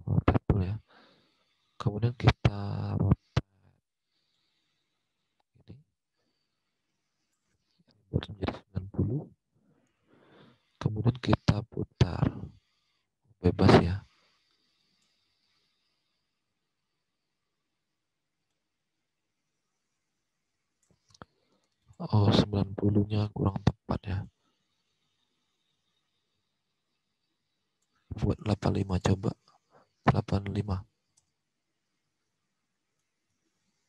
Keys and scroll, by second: 8.9-9.8 typing, 29.7-30.4 typing, 31.0 Return.